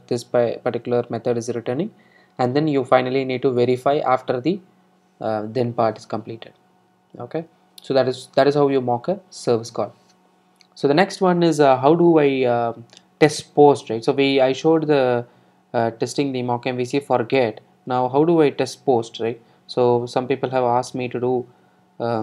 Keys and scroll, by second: 18.9 super+d.